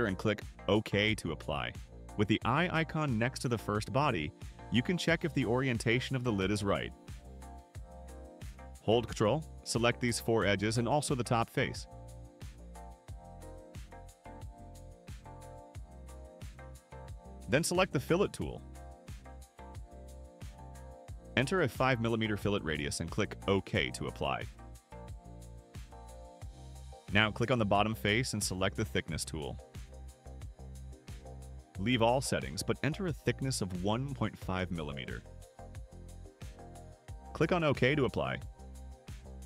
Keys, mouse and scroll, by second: 0.6 click, 3.0 click, 5.9 click, 8.8 click, 9.7 click, 10.6 ctrl+click, 11.5 ctrl+click, 12.3 ctrl+click, 12.6-13.9 drag, 14.9 ctrl+click, 15.4-16.8 drag, 19.6 click, 22.6 5, 24.7 click, 25.6-26.8 drag, 27.2 click, 30.8 click, 31.9 right click, 33.4 click, 33.9-35.5 typing, 35.8 click, 39.0 click.